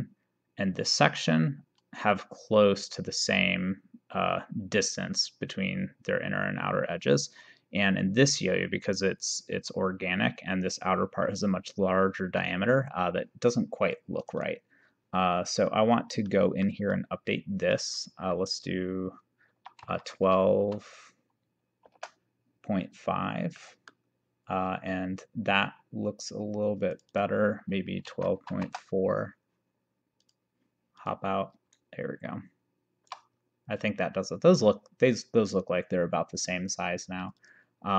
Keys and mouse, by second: 14.2 click, 16.3 middle click, 17.8 click, 19.8 1, 20.0 2, 20.2 ., 20.7 5, 23.7 middle click, 27.0 click, 28.1 1, 28.2 2, 28.4 ., 28.6 4, 30.3 click, 31.8 shift+right click, 37.2 click.